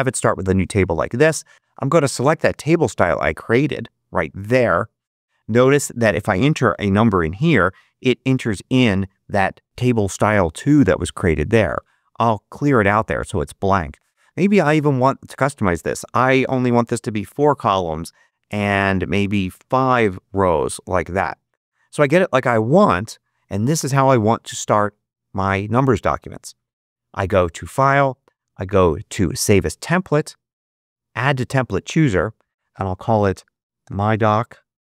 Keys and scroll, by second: 6.6 9, 7.0 Return, 11.6 BackSpace, 33.1-34.8 typing.